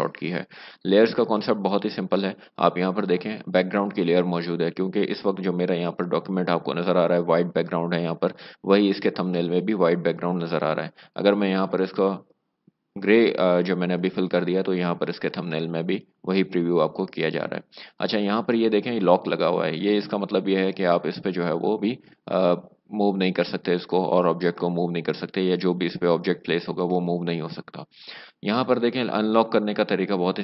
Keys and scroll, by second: 12.4 alt+BackSpace.